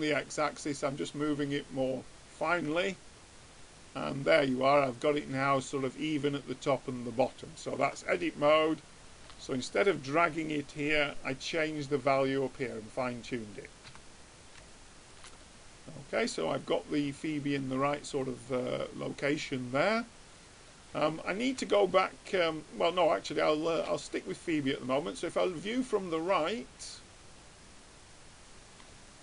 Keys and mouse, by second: 3.1 Tab, 8.1 Tab, 13.4-15.3 middle drag, 14.3 Tab, 21.2-22.3 middle drag, 25.0-26.9 drag, 27.8 middle click.